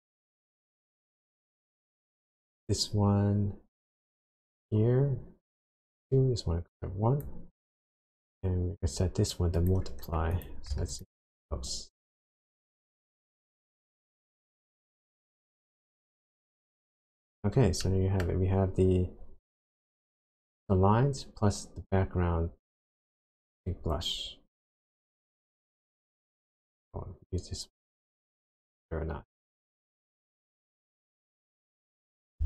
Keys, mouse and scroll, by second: 2.3 click, 5.5 click, 8.3 click, 10.4 click, 11.0 ctrl+shift+click, 12.9-13.3 scroll down 1, 13.7-14.3 scroll down 2, 15.1-16.8 scroll up 7, 16.8 scroll down 1, 17.0-17.3 scroll up 1, 17.8 middle click, 18.4 scroll up 2, 25.4 click, 27.3 click, 31.0 click, 31.3-32.4 scroll down 9.